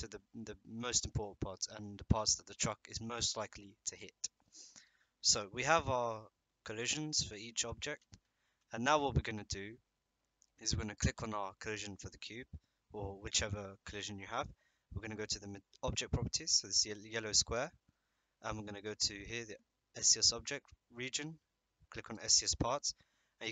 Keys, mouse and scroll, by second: 5.3 click, 17.5 click, 22.1 click.